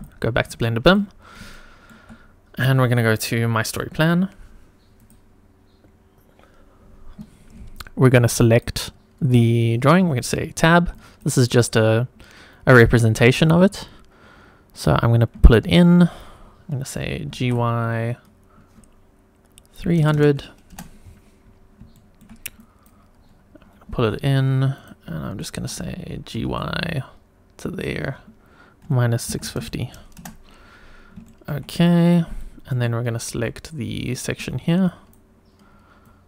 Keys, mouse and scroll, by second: 0.8 click, 1.5-1.9 shift+middle drag, 2.3 scroll down 1, 3.1 click, 4.1 click, 4.9 click, 8.5 click, 10.1 Tab, 10.9 click, 11.7-12.6 scroll up 2, 12.6 click, 15.5 shift+middle click, 16.0-16.5 scroll up 2, 17.2 g, 17.4 y, 19.8 KP_3, 19.9 KP_0, 20.1 KP_0, 20.7 Return, 21.4-21.8 scroll down 2, 21.9 shift+middle click, 22.6 click, 23.8 g, 24.0 y, 25.0 click, 25.2 scroll up 2, 25.4 shift+middle click, 26.3 g, 28.8 KP_Subtract, 29.2 KP_6, 29.5 KP_5, 29.6 KP_0, 30.2 Return, 30.8-31.1 scroll down 3, 31.3 shift+middle click, 31.8 scroll up 2, 32.4 shift+middle click, 32.9 scroll down 1, 33.3 Tab, 34.0 click, 34.3 Tab, 34.8 click, 36.1 click.